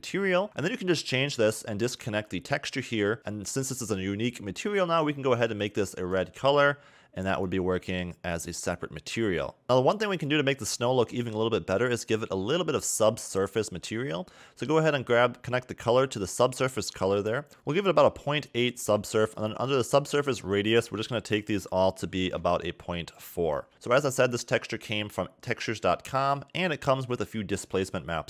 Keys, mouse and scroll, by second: 0.4-1.2 scroll down 1, 2.0 click, 3.2 click, 3.7 click, 7.4 click, 11.4-12.1 scroll up 5, 12.5 middle click, 14.8 click, 19.5 click, 23.7 middle click, 25.6 click.